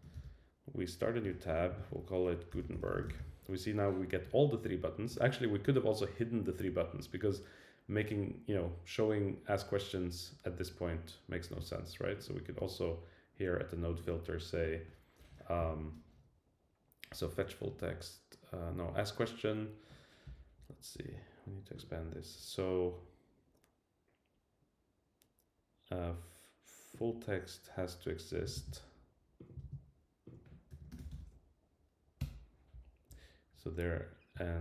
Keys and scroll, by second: 1.2 Return, 28.5 super+c, 29.6 super+v, 32.2 Return.